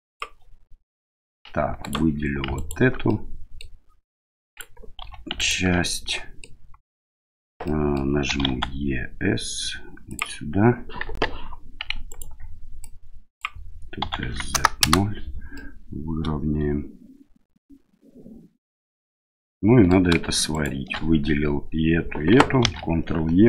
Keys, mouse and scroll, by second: 1.0 middle click, 1.8 alt+right click, 2.5 alt+right click, 3.1 middle click, 4.5 right click, 5.0 2, 5.3 alt+right click, 5.8 middle click, 7.6 middle click, 8.3 e, 11.0 KP_1, 12.0 right click, 12.8 click, 14.0 s, 15.6-19.9 middle drag, 20.5 alt+shift+right click, 22.6 ctrl+e.